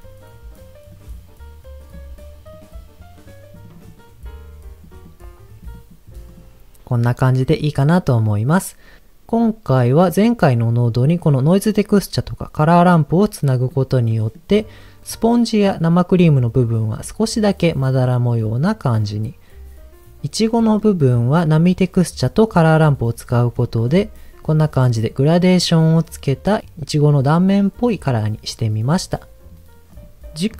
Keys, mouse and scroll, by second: 0.0-0.9 scroll down 4, 0.9-1.9 drag, 1.9-3.5 drag, 3.6 click, 3.9 click, 5.0 click, 5.7 click, 6.2 click, 6.4 scroll down 1, 7.3-7.6 scroll down 4, 7.6 middle click, 8.3-9.2 scroll down 3, 9.3 middle click, 10.8 middle click, 11.1 scroll up 1, 11.8-12.2 scroll up 1, 13.4 middle click, 14.0-14.4 middle drag, 20.5 middle click, 21.1 scroll down 1, 21.4 middle click, 23.1-23.5 scroll up 1, 23.6-23.9 shift+middle drag, 23.9 scroll up 2.